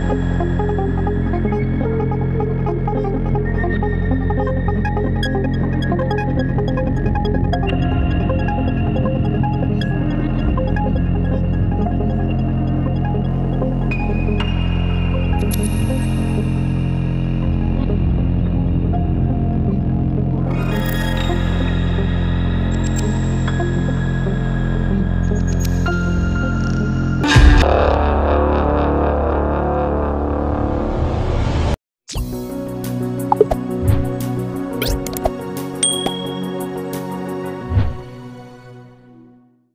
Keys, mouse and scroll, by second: 0.0 ctrl+=, 0.2 ctrl+-, 0.9 ctrl+-, 1.1 ctrl+=, 1.1 ctrl+=, 1.3 ctrl+=, 2.4 ctrl+z, 2.8 ctrl+c, 2.8 ctrl+v, 3.8 Right, 4.2 Right, 4.7 ctrl+-, 5.0 ctrl+-, 5.4 ctrl+=, 5.9 alt+click, 6.9 ctrl+-, 7.2 ctrl+z, 7.2 ctrl+=, 7.4 ctrl+=, 7.9 right click, 8.9 alt+click, 9.5 alt+click, 10.3 ctrl+-, 10.5 ctrl+=, 10.8 ctrl+-, 15.8 F10, 15.9 F10, 16.6 right click, 19.5 ctrl+=, 19.9 ctrl+-, 20.2 ctrl+=, 20.7 ctrl+-, 20.8 ctrl+=, 21.0 ctrl+-, 21.3 ctrl+=, 21.6 ctrl+-, 21.9 ctrl+=, 22.3 ctrl+-, 22.6 ctrl+=, 22.9 ctrl+-, 23.2 ctrl+=, 23.6 ctrl+-, 23.8 ctrl+=, 24.0 ctrl+-, 24.3 ctrl+=, 24.6 ctrl+-, 24.9 ctrl+=, 25.2 ctrl+-, 25.5 ctrl+=, 25.8 ctrl+-, 26.1 ctrl+=, 27.3 ctrl+=, 27.7 ctrl+-, 27.9 ctrl+-, 28.2 ctrl+=, 28.5 ctrl+-, 28.8 ctrl+=, 29.2 ctrl+-, 29.3 ctrl+=, 29.5 ctrl+-, 29.7 ctrl+=, 30.0 ctrl+-, 30.2 ctrl+=.